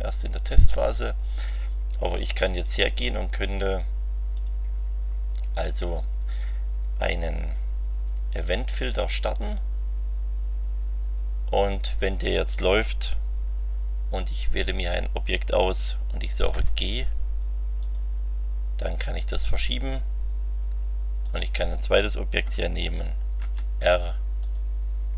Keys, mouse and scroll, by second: 2.6 click, 4.3 click, 9.4 click, 14.5 click, 16.5 g, 17.8 click, 19.3 click, 21.2 click, 23.3 r, 24.4 click.